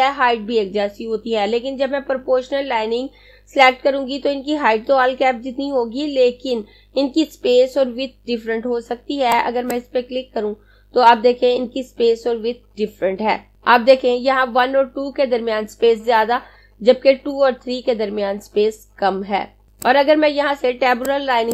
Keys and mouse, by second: 8.6 click, 19.7 click.